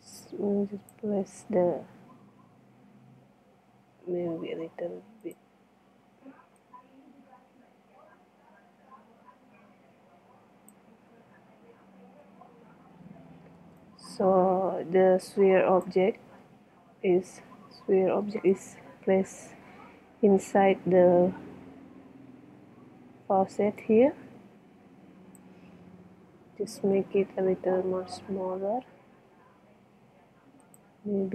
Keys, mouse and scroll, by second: 1.5 z, 3.7 s, 11.3 KP_1, 12.5 z, 26.0 KP_7, 27.0 z, 28.1 s.